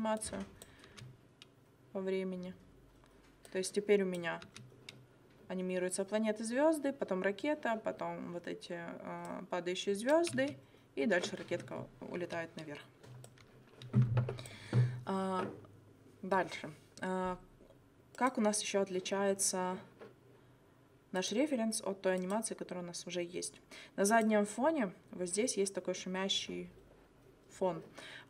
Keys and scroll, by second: 0.9 space, 4.4 space, 10.3 space, 12.2 space.